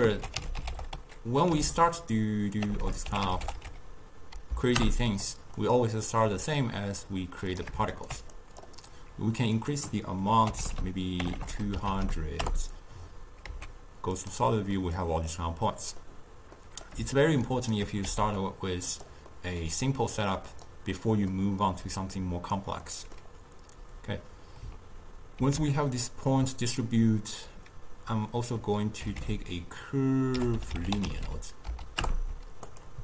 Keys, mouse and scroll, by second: 2.9 BackSpace, 6.5 drag, 8.0 alt+shift+click, 8.4-10.8 drag, 10.8 0, 11.4 BackSpace, 11.5 BackSpace, 12.1 0, 13.5 z, 14.9-17.5 middle drag, 17.5 shift+right click, 18.1 g, 19.3 middle click, 20.2 click, 21.0-22.0 middle drag, 22.0 click, 22.9-25.5 middle drag, 25.5 ctrl+a.